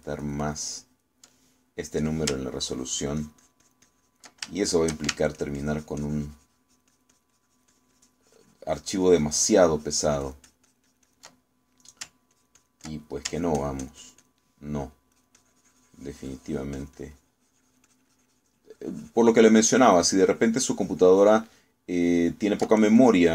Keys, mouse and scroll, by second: 3.8-5.4 ctrl+drag, 5.6 ctrl+shift+middle click, 6.4-12.4 ctrl+shift+drag, 13.4 ctrl+click, 14.4-15.5 ctrl+drag, 16.2-22.6 ctrl+drag.